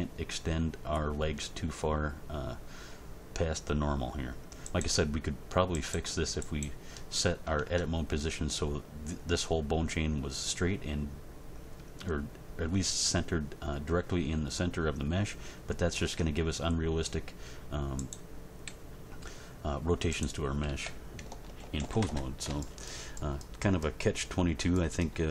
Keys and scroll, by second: 7.6 Tab, 16.0 Tab, 18.7 g, 20.6 a, 21.6 alt+r, 21.8 alt+g, 22.0 alt+s.